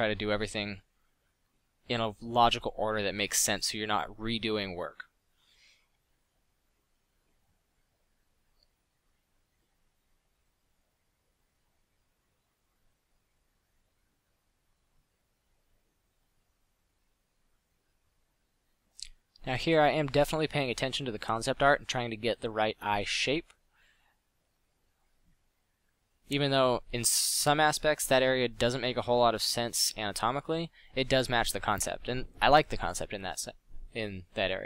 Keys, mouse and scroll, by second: 4.6 f, 6.7 click, 9.7 f, 13.7-14.1 middle drag, 14.4 f, 20.7 f, 25.4 middle drag, 28.2 f, 30.1 f.